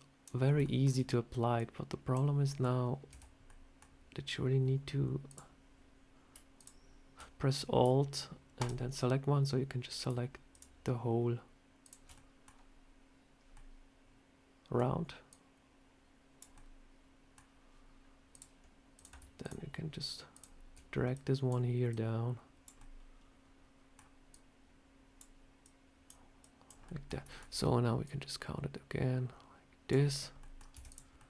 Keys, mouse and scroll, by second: 0.3 scroll up 2, 0.5 shift+middle click, 1.4 click, 2.3 middle click, 3.0 Tab, 3.3 middle click, 5.1 click, 6.4 alt+click, 10.4 alt+click, 10.4 alt+shift+click, 12.0 alt+shift+click, 12.0 middle click, 13.4 middle click, 15.2 click, 16.4 middle click, 18.2 click, 18.8 click, 19.3 shift+click, 19.4 shift+click, 21.0 click, 21.8 click, 22.6 middle click, 24.2 click, 25.5 click, 26.3 click, 26.7 middle click, 27.2 shift+middle click, 27.9 click, 30.0 scroll down 2, 30.3 middle click, 30.6 Tab, 30.7 click, 31.0 middle click.